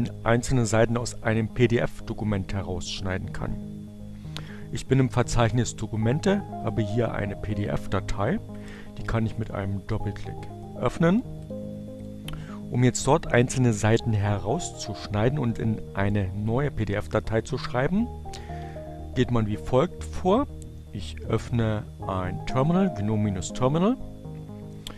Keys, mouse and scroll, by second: 5.2-6.7 drag, 8.2 click, 10.8 click, 11.8 click, 24.6-24.9 drag.